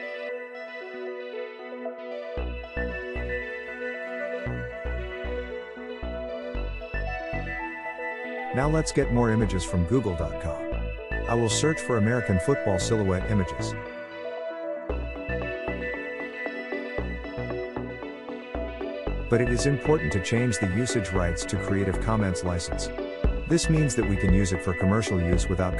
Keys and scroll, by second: 8.2-10.9 typing, 12.6 typing, 14.2-15.4 typing, 15.4 Return.